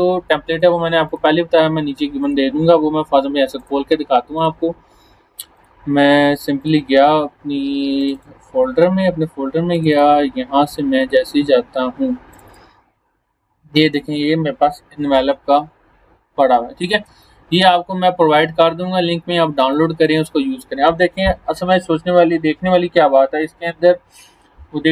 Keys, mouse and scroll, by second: 0.5 click, 14.4 click, 16.1 scroll down 1, 17.0 space, 17.2-18.4 click, 17.5 space, 18.7-19.1 alt+scroll down 1, 19.6 space, 19.7 click, 20.1 space, 23.4-24.3 drag.